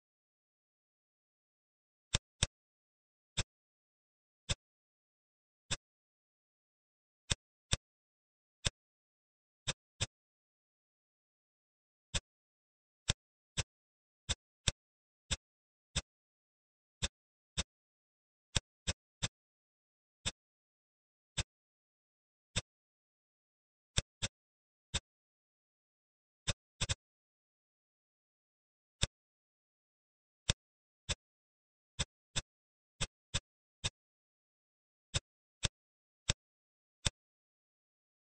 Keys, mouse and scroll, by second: 2.3 click, 3.1 ctrl+r, 4.9 ctrl+r, 7.6 click, 8.3 ctrl+r, 9.9 click, 10.4-10.9 scroll up 2, 10.9-12.0 scroll down 1, 12.0 click, 12.9 click, 13.5 shift+click, 14.2 shift+click, 14.5 shift+click, 15.2 shift+click, 15.9 shift+click, 16.9-18.9 drag, 19.1-22.5 middle drag, 22.5 click, 23.4 ctrl+s, 23.6 Tab, 23.9 click, 24.2-26.0 middle drag, 26.0-26.4 scroll up 2, 26.4-28.3 middle drag, 28.9 click, 29.5 Tab, 30.4 click, 31.0 shift+click, 32.0 shift+click, 32.3 shift+click, 32.9 shift+click, 33.8-35.0 middle drag, 35.0-36.2 drag.